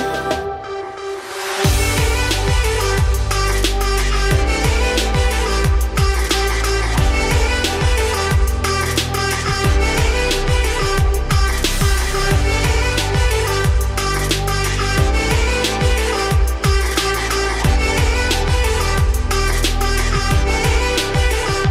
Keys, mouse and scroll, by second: 0.3-0.6 scroll up 3, 0.6 ctrl+s, 0.9 click, 1.2-2.1 middle drag, 2.1 g, 3.4 h, 4.3 click, 4.7-6.0 right drag, 6.0 click, 6.3 scroll down 1, 6.4-9.1 middle drag, 9.1 click, 10.3 click, 11.2 click, 12.2 click, 13.4 click, 14.0-15.4 middle drag, 15.4-15.9 scroll down 4, 15.6 click, 15.9-16.8 middle drag, 16.8 scroll up 2, 18.2 alt+h, 18.9-21.0 middle drag, 21.0 click.